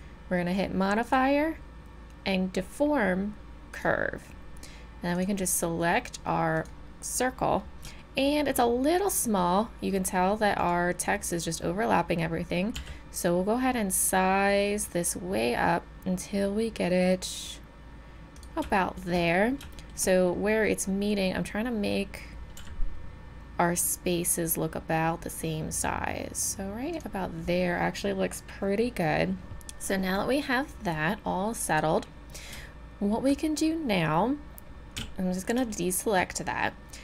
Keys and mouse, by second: 5.1-7.5 drag, 7.9-10.6 middle drag, 10.6-12.3 drag, 12.3-16.0 middle drag, 12.7 s, 18.7-24.0 middle drag, 22.6 s, 31.7-34.5 drag, 35.0 a, 35.7-37.0 drag.